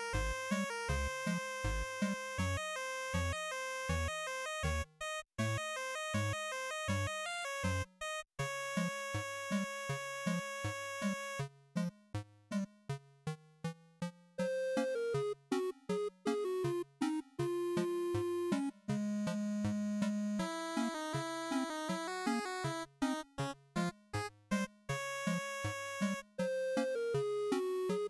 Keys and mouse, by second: 11.1-12.7 drag, 13.7-15.2 drag, 27.8 click.